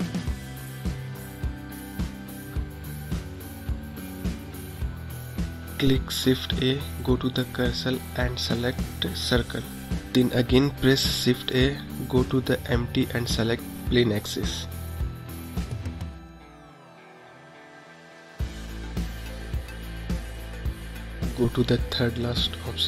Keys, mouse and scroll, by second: 2.4 click, 4.0 shift+a, 8.1 scroll up 2, 8.7-10.1 middle drag, 10.1 s, 12.3 shift+a, 15.0-15.9 scroll up 3, 15.9-18.3 middle drag, 18.3-19.0 scroll up 2.